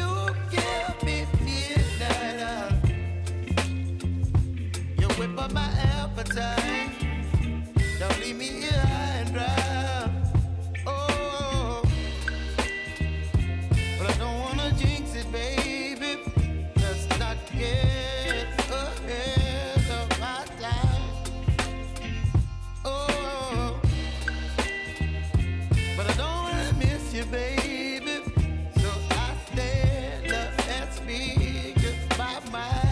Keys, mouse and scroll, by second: 1.0-3.5 drag, 4.3 scroll down 1, 5.2 click, 7.4 scroll up 1, 8.3 click, 9.1 scroll up 1, 9.8 click, 12.3 p, 13.0 click, 14.1-17.3 typing, 14.6 click, 15.3 click, 19.3 click, 20.3-20.8 typing, 22.0 click, 23.4 alt+scroll up 1, 24.0 click, 25.2 ctrl+z, 26.2-30.8 drag, 30.8 k, 31.8 click.